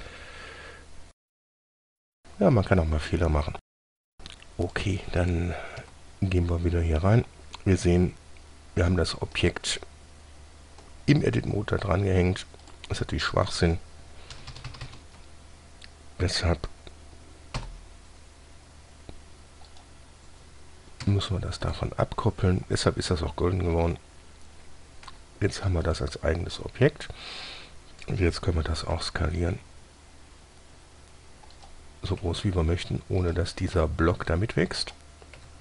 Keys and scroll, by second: 6.1 Tab, 14.6 ctrl+KP_Add, 14.8 ctrl+KP_Add, 15.0 ctrl++, 17.9 p, 21.3 Tab, 25.4 g, 29.2 s, 32.5 s.